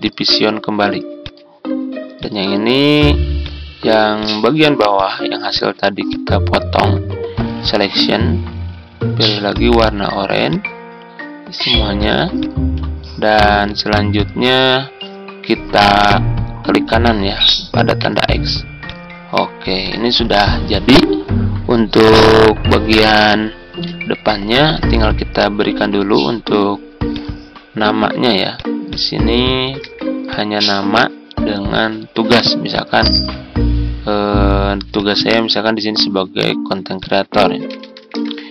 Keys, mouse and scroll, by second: 29.7 ctrl+c, 33.0 ctrl+v, 37.3-38.5 typing.